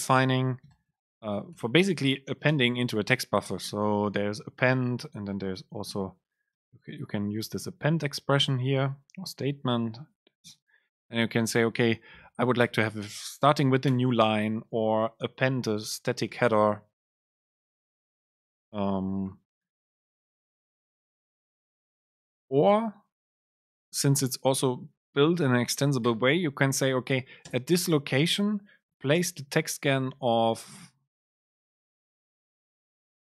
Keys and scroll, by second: 3.6 Right, 3.9 Up, 4.3 Down, 4.8 Up, 5.1 End, 5.4 Return, 5.7 super+space, 6.6 BackSpace, 7.0 Down, 7.4 alt+Up, 7.7 End, 8.0 Up, 8.4 End, 8.7 Left, 10.5 super+space, 13.5 End, 14.0 Return, 14.5 Return, 14.6 super+space, 20.1 super+Right, 20.2 Return, 20.6 super+space, 27.6 super+space, 31.7 BackSpace.